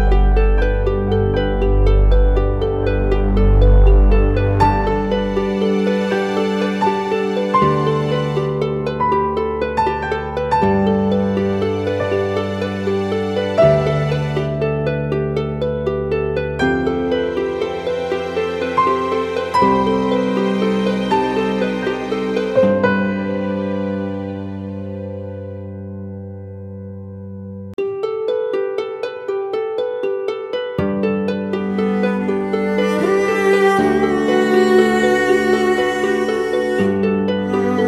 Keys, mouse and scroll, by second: 0.0-0.5 typing, 4.7-5.3 typing, 14.8 typing, 28.4 typing, 29.3 double click, 31.4 ctrl+t.